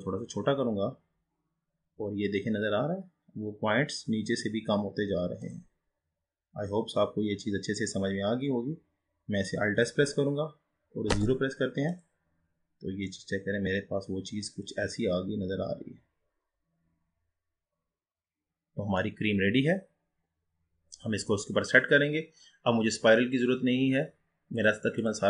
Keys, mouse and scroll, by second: 5.9-8.5 scroll up 7, 10.0 alt+s, 12.6-13.3 scroll down 3, 13.3-16.3 middle drag, 19.3-20.3 scroll down 5, 20.3-23.3 scroll up 2, 24.5-25.2 drag.